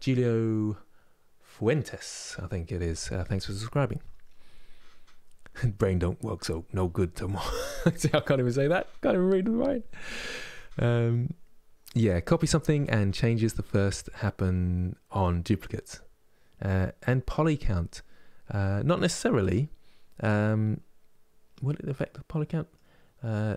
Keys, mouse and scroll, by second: 18.9-23.5 middle drag.